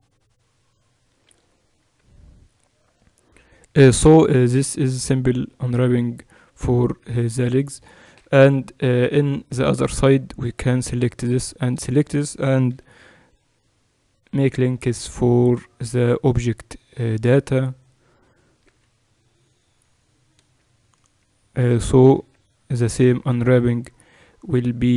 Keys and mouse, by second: 1.1 a, 1.4 click, 1.7 click, 1.7 a, 2.3-5.0 drag, 7.2 Tab, 8.3 KP_Divide, 12.5 ctrl+l, 12.5 right click, 17.6-19.5 right drag, 18.5 h, 20.9 click, 21.7 right click, 22.0 Tab, 23.1 Tab, 23.1-24.9 right drag.